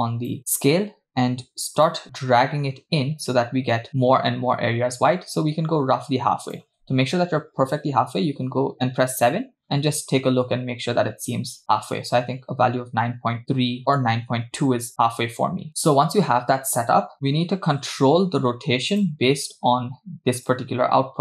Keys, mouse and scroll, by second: 2.0-6.6 shift+drag, 8.1 KP_7, 9.6-11.8 scroll up 2, 12.0-15.7 shift+drag, 15.7-16.4 middle drag, 15.7-16.4 scroll down 2, 17.1 KP_0, 17.4-18.9 scroll down 6, 19.0 drag, 20.5 click, 20.9-21.2 scroll down 3.